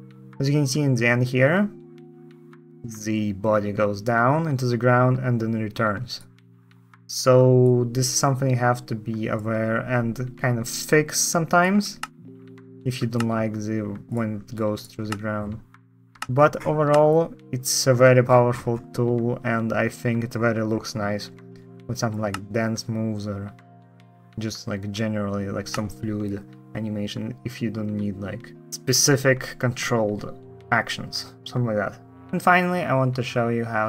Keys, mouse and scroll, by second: 8.0 ctrl+click, 11.7 space, 12.9 space, 12.9 space, 14.8 ctrl+space, 15.9 space, 16.6 space, 22.0 space, 25.4 space.